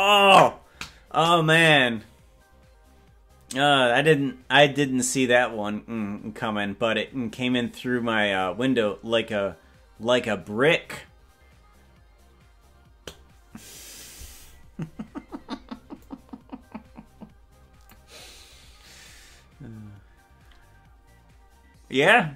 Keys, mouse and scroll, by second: 14.4 scroll up 2, 16.2-18.1 drag.